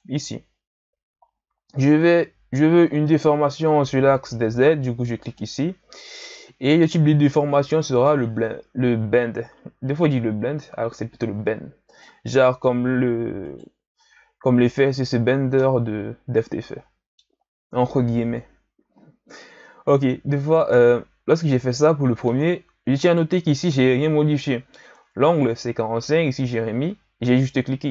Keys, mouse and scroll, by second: 1.7-2.3 scroll down 2, 2.3-3.0 ctrl+scroll up 2, 3.0-5.2 middle drag, 5.2 click, 11.9 click, 13.5 right click, 14.7-15.6 scroll up 2, 15.6-17.4 middle drag, 17.4-20.4 scroll up 1, 20.7-23.0 middle drag, 23.0 right click.